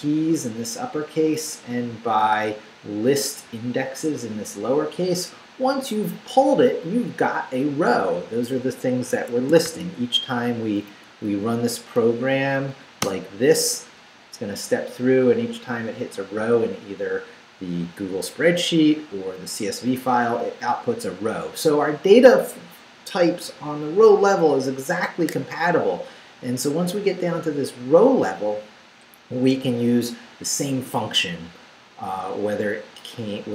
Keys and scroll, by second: 1.8 Down, 3.8 Down, 5.1 Up, 9.2 Escape, 9.7 shift+;, 10.2 shift+Up, 13.0 Return.